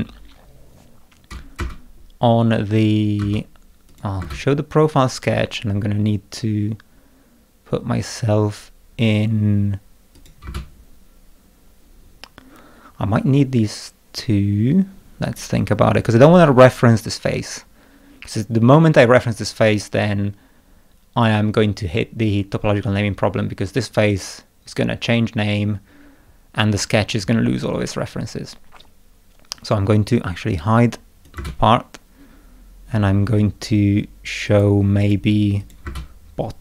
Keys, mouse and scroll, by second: 1.6 space, 3.2 space, 3.9 click, 4.2 space, 10.1 click, 10.4 space, 15.2 click, 31.2 click, 31.3 space, 34.4 click, 35.0 click, 35.6 click, 35.8 space.